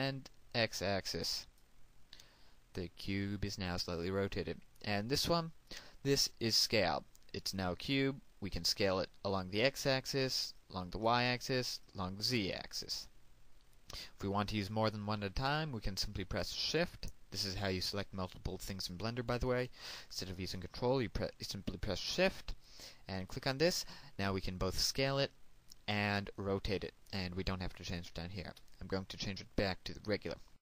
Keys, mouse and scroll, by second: 24.1 shift+click, 30.4 click.